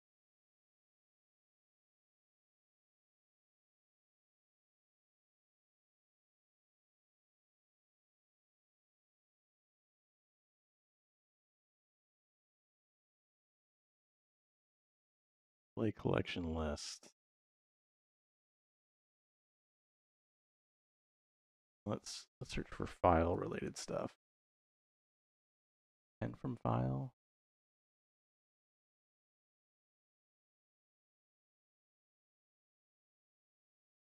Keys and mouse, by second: 1.7 click, 2.9 middle click, 4.1 click, 4.9 shift+a, 16.7-18.2 drag, 18.5 click, 18.9 click, 19.9 shift+a, 28.5 middle click, 29.6 middle click, 31.2 click, 32.0 x, 32.3 shift+a.